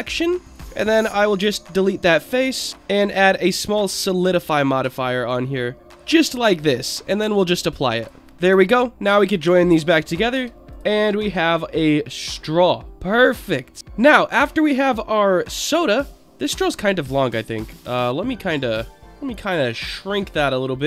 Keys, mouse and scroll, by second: 0.4 click, 0.5 Tab, 1.0 Delete, 2.7 Tab, 3.0 click, 3.7-5.9 drag, 7.4-8.0 drag, 8.2 Tab, 8.2 middle click, 8.2 scroll down 2, 8.7 shift+click, 10.3 ctrl+j, 10.6 scroll up 2, 10.7 click, 11.0-13.3 middle drag, 13.6 scroll down 4, 14.0 click, 14.3-14.8 middle drag, 15.3-15.7 scroll up 3, 15.7-16.2 middle drag, 16.4 scroll up 2, 16.6 Tab, 17.6-18.6 drag, 19.3 click, 20.7 click.